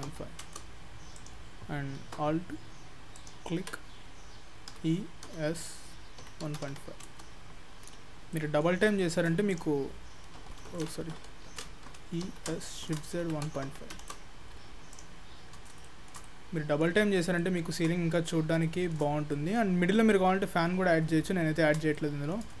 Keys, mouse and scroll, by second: 1.2 click, 3.2 alt+click, 4.8 e, 7.7-8.4 scroll down 3, 8.4 middle click, 8.9 shift+middle click, 9.5 click, 10.7 ctrl+z, 11.5 ctrl+z, 11.9 e, 15.0 click, 15.5 scroll down 2, 15.9 shift+middle click, 16.3 middle click, 17.2 scroll down 2, 17.4 shift+middle click, 18.0 scroll down 2, 18.7 shift+middle click, 19.4 middle click, 21.6 scroll up 2, 22.0 shift+middle click.